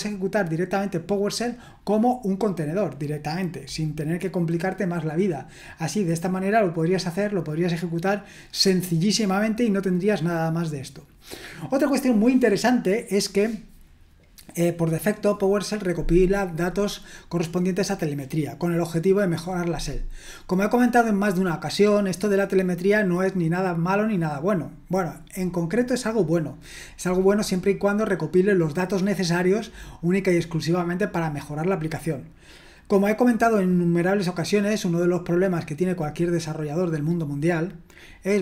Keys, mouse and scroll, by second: 8.3-8.9 scroll down 1, 8.9-10.2 scroll down 1, 10.2-38.4 scroll down 1.